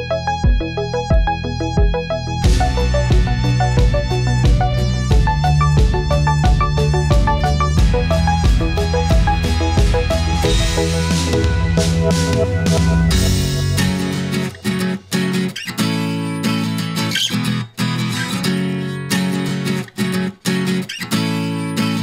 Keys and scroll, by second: 14.1 Return.